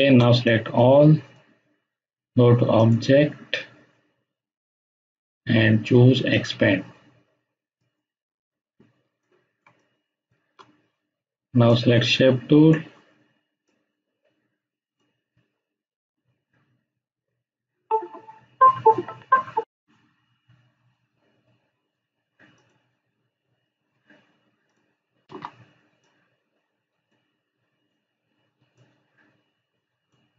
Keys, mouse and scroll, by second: 0.4-1.3 drag, 6.3 click, 9.0 space, 9.2-10.4 ctrl+drag, 25.2 ctrl+z, 26.0-27.2 drag.